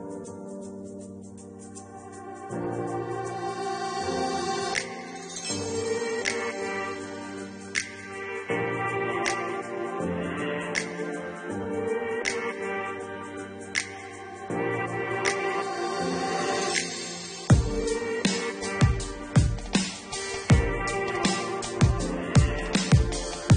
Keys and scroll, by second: 15.8 -, 16.5 8, 16.7 0.